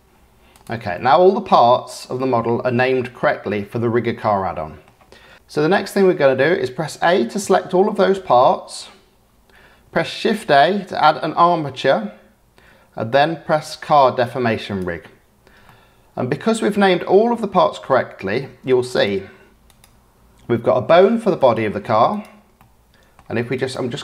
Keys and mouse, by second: 0.5 click, 0.9-1.8 drag, 2.1-3.5 drag, 4.3 click, 7.4 a, 10.2 shift+a, 15.7 click, 16.6-17.8 middle drag, 17.8 click, 19.6 click, 21.3 click, 22.1 click, 22.5-23.1 drag, 23.6 click.